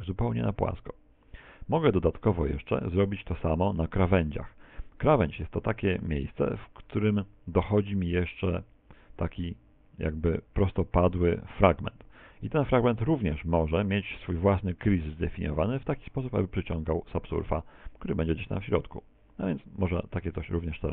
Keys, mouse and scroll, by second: 9.6 middle click, 11.5 scroll up 5, 11.7 middle click, 12.3 middle click, 12.7 shift+middle click, 12.9 middle click, 20.5 click.